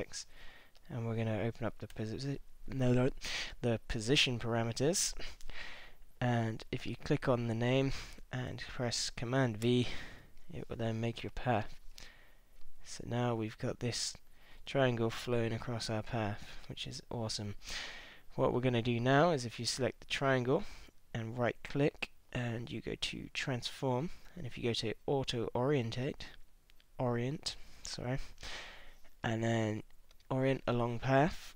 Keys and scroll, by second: 1.9 p, 9.6 super+v.